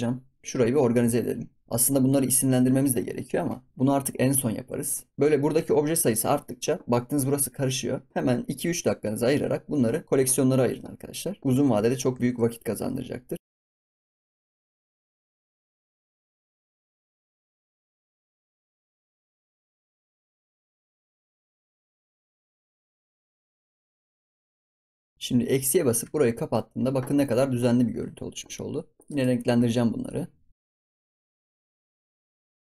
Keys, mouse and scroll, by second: 0.4 ctrl+s, 1.0 click, 4.4 ctrl+s, 11.4 ctrl+s, 12.1 ctrl+s, 12.3-13.0 middle drag, 13.0-13.4 scroll up 1, 13.4 click, 13.5 scroll down 2, 13.5 middle drag, 14.0 m, 14.6 BackSpace, 15.4 ctrl+s, 15.4 shift+click, 15.8 scroll up 3, 15.8 ctrl+s, 16.0 click, 16.0 ctrl+s, 16.2 click, 17.1 shift+click, 17.3 shift+click, 17.9 m, 18.6 Return, 19.0 click, 19.1 middle click, 19.3-19.6 shift+drag, 19.9 ctrl+s, 20.0 middle drag, 20.1 ctrl+s, 20.2 middle drag, 20.4 shift+click, 20.5 ctrl+s, 20.5 middle click, 20.7 ctrl+s, 20.8 shift+middle click, 20.9 ctrl+s, 20.9 scroll down 1, 21.0 shift+middle click, 21.1 ctrl+s, 21.6 shift+click, 21.7 m, 22.7 BackSpace, 22.7 BackSpace, 23.9 ctrl+s, 23.9 BackSpace, 24.5 m, 25.9 KP_Subtract, 29.0-31.7 right drag, 31.7 click, 31.9 right click, 32.3 click, 32.5 scroll up 1.